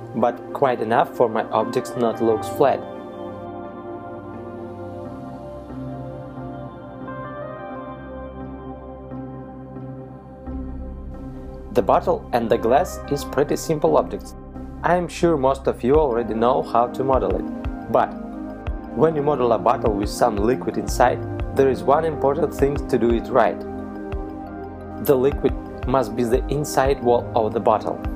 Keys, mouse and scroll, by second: 10.0 middle click, 11.4 right click, 12.3 KP_Decimal, 15.0 middle click, 16.4-17.0 scroll down 1, 17.6 right click.